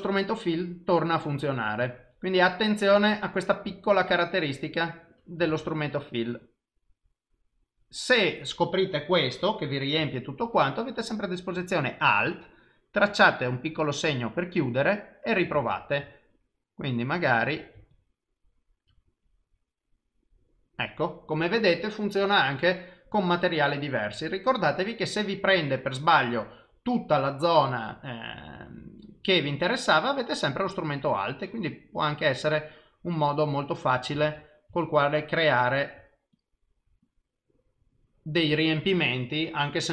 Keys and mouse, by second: 4.0 alt+click, 5.5 ctrl+z, 6.5 click, 10.5 ctrl+z, 12.3 alt+click, 14.0 click, 15.6 ctrl+z, 16.4 alt+click, 17.3 alt+click, 18.0 alt+click, 19.3 click, 31.0 alt+click, 32.5 click, 34.3 ctrl+z, 35.1 alt+click, 36.4 alt+click, 37.1 click.